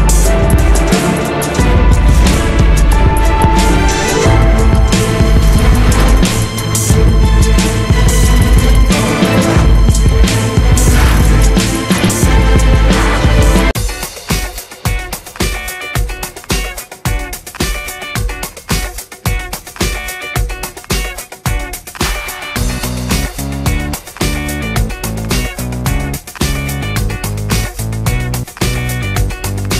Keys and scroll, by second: 3.1 Escape, 7.4 Escape, 16.1 Escape, 20.0 Escape, 23.7 Escape.